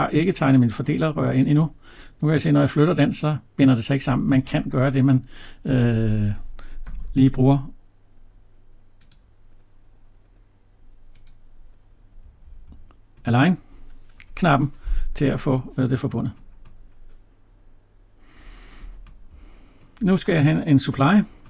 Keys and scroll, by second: 14.1 Escape.